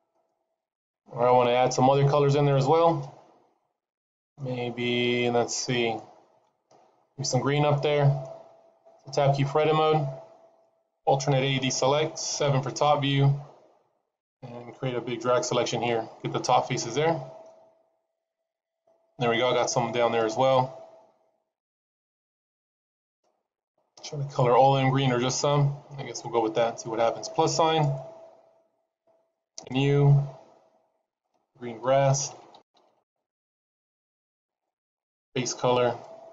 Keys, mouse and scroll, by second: 2.5 middle click, 5.1 middle click, 5.9 shift+middle click, 7.7 middle click, 9.3 Tab, 11.2 alt+a, 12.3 KP_7, 13.3-14.1 scroll down 3, 15.7 click, 17.3 middle click, 20.1 middle click, 21.9 KP_3, 22.7-23.1 scroll up 2, 23.1 middle click, 27.6 click, 29.4 click, 31.0 click, 32.3 e, 34.9 click.